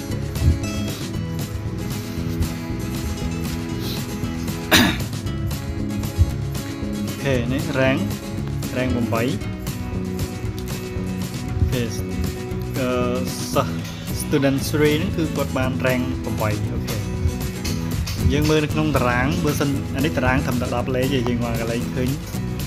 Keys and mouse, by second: 0.2 ctrl+click, 1.6 ctrl+click, 7.1 ctrl+click, 10.3 click, 11.2 click, 13.0 click, 16.0 click, 17.7 click, 19.6 click, 21.9 click.